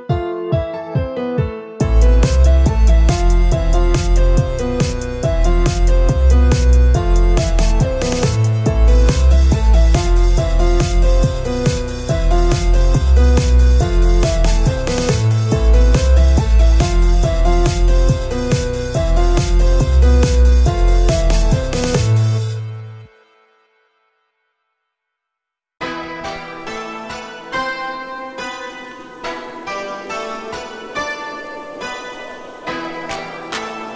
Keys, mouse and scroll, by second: 0.7 h, 1.5 ctrl+z, 2.0-4.1 typing, 4.2 scroll down 3, 4.3-6.3 middle drag, 6.3 scroll up 1, 6.5 shift+middle click, 7.3-14.3 typing, 7.9 scroll up 2, 14.4 scroll down 1, 14.6 middle click, 15.2-15.7 scroll up 1, 16.1 l, 16.6 g, 17.3 a, 17.4 a, 17.7 middle click, 18.2 scroll up 1, 18.5 shift+middle click, 19.2 scroll up 1, 19.4-20.5 shift+middle drag, 20.5 scroll up 3, 20.7 click, 21.0 Tab, 21.3 Tab, 21.8-24.8 typing, 23.7 shift+middle click, 26.0 a, 26.0 a, 26.2-27.3 middle drag, 27.3-28.7 typing, 27.7 scroll up 2, 28.9 shift+middle click, 29.5 click, 29.7-31.3 typing, 30.3 scroll down 4, 30.5 shift+middle click, 31.0 Tab, 31.5 scroll up 1, 31.6 middle click, 32.0 scroll up 1, 32.2 middle click, 32.7 click, 32.9 Tab, 33.1 scroll up 2, 33.3 shift+middle click.